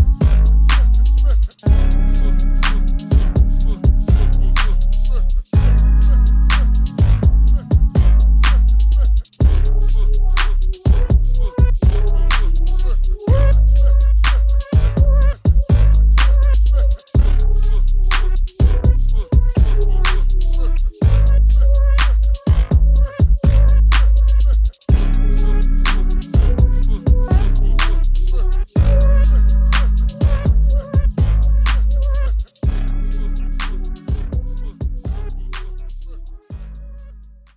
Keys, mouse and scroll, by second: 3.9 click, 4.5 click, 5.2 middle click, 7.1-8.7 middle drag, 10.1-11.7 drag.